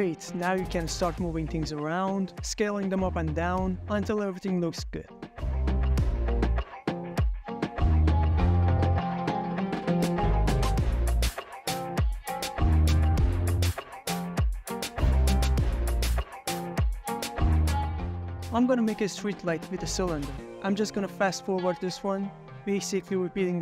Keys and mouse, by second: 0.3 click, 0.4 middle click, 0.5 shift+middle click, 0.6 middle click, 0.9 click, 1.0 middle click, 1.1 shift+click, 1.3 click, 1.5 Tab, 1.5 click, 2.1-8.6 typing, 2.7 middle click, 3.1 middle click, 3.7 Escape, 3.7 middle click, 4.8 click, 4.9 ctrl+middle click, 5.9 middle click, 6.6 Tab, 6.6 click, 6.8 ctrl+click, 7.3 Escape, 7.4 click, 7.8 Escape, 8.5 click, 9.1 click, 9.3 middle click, 9.7 ctrl+middle drag, 10.0-11.6 typing, 10.2 click, 11.3 click, 11.4 middle click, 11.8 middle click, 12.0 middle click, 12.2 middle click, 12.4 click, 12.6 s, 12.9 u, 12.9 y, 13.3 x, 14.9 Escape, 15.1 s, 15.3 x, 15.8 drag, 16.1 middle drag, 16.4 ctrl+middle click, 16.6 middle drag, 17.4 shift+a, 19.7 middle click, 20.2 g, 20.3 x, 20.3 y, 21.0 middle drag, 21.4 middle click, 21.6 ctrl+middle drag, 21.9-23.6 typing, 22.2 Escape, 22.5 middle click, 22.6 Tab, 22.9 middle click, 23.3 middle click.